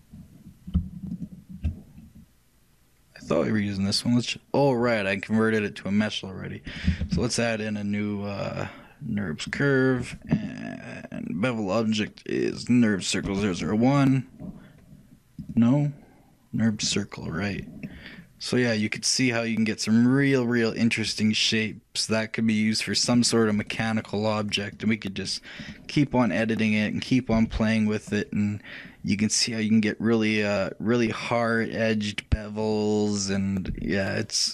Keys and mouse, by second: 1.2-2.8 shift+drag, 2.8 shift+right click, 4.1-6.7 right drag, 6.7 shift+click, 7.1 shift+a, 11.2-13.1 drag, 15.5-17.3 drag, 17.9-19.9 middle drag, 24.6-27.1 drag, 24.6-32.7 right drag.